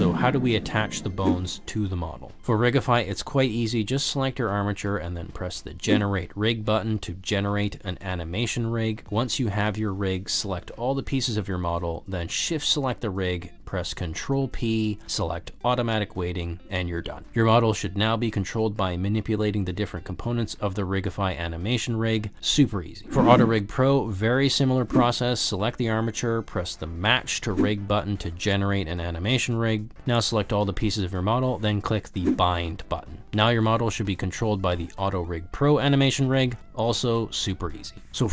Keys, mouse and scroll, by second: 1.6 click, 2.5 click, 3.5 click, 3.7 click, 6.1 click, 8.0 middle click, 9.3 middle click, 9.5 middle click, 10.4 click, 11.5 g, 11.8 click, 12.1 ctrl+z, 12.6 shift+click, 13.6 ctrl+p, 19.1-19.8 drag, 20.1 middle click, 20.8 click, 21.2 r, 21.2 z, 22.0 ctrl+z, 22.1 g, 24.7 click, 25.7 click, 29.0-29.6 middle drag, 29.8 alt+z, 30.0-30.6 middle drag, 30.8 shift+click, 32.0 click, 35.2 click, 35.4 g.